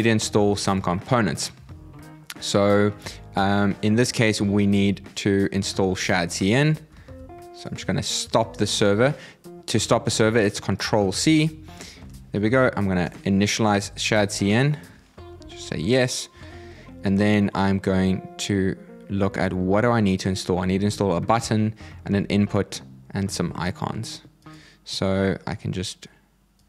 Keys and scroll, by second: 6.6 super+c, 10.6 ctrl+c, 11.7 super+v.